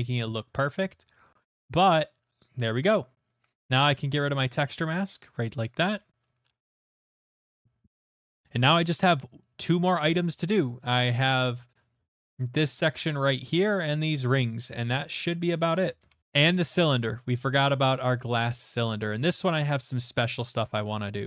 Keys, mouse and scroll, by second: 0.1 click, 1.1 click, 5.1 click, 5.9 middle click, 5.9 middle click, 5.9 middle click, 6.0 middle click, 6.4 middle click, 6.8 middle click, 6.9 middle click, 7.0 middle click, 7.1 middle click, 7.3 middle click, 7.5 shift+middle click, 7.8 middle click, 8.7 shift+middle click, 9.9 middle click, 10.8 shift+middle click, 11.8 middle click, 12.1 middle click, 12.5 shift+middle click, 12.7 middle click, 13.2 shift+middle click, 13.6 shift+middle click, 15.6 middle click, 15.9 middle click, 16.0 shift+middle click, 16.2 alt+h, 17.9 click, 18.1 shift+middle click, 19.1 middle click, 20.7 middle click.